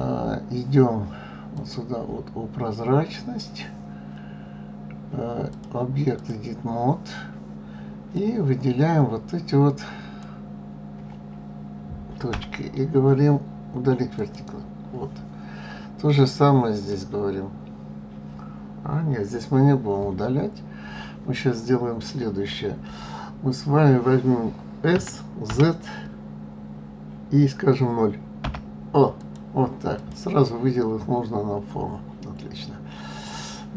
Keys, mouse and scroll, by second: 0.0 click, 1.5 click, 5.5-8.3 drag, 12.3 Delete, 16.3 click, 24.9 s, 29.9 click, 30.4-33.4 middle drag.